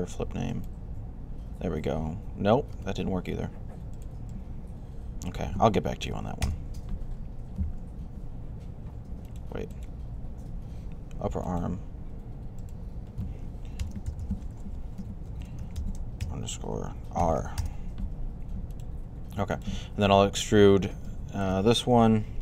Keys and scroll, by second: 2.7 super+z, 13.4-17.0 typing, 22.3 e.